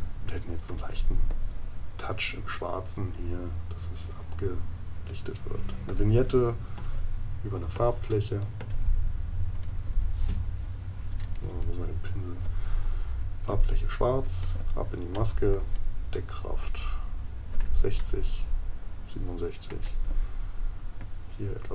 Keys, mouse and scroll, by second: 18.0 right click.